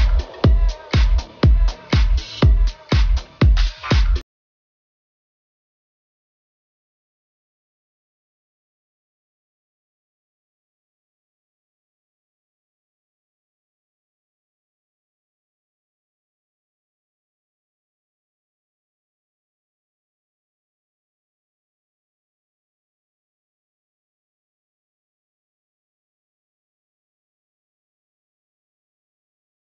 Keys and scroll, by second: 1.2-2.7 typing, 3.8-8.4 typing, 9.2 super+s, 12.4 super+v, 16.8 t, 17.4 shift+4, 21.0 BackSpace, 21.9 Down, 22.1 Up, 23.4 Up, 24.0 Down, 24.5 Up, 25.6 Up, 25.8 Down, 27.0 Up, 27.7 Up.